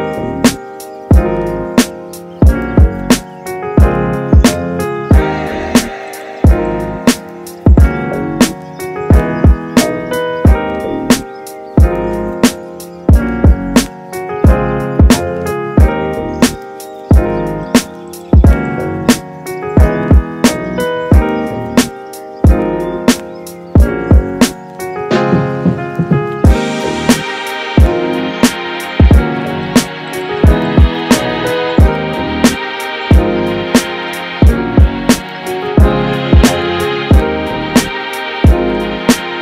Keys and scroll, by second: 4.9 space, 20.2 space, 26.7 space, 33.6 space, 35.1 space.